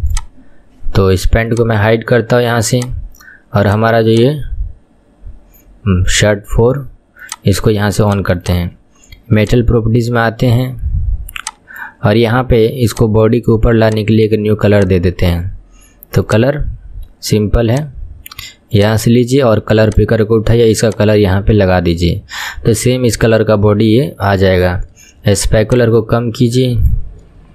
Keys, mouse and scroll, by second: 0.1 click, 1.5 click, 2.8 click, 3.7 click, 4.1 click, 7.3 click, 8.1 click, 8.4 click, 9.5 click, 11.4-13.0 drag, 13.9-18.9 drag, 23.8-25.7 scroll down 5, 25.7-27.3 shift+drag, 27.3-27.5 scroll down 4.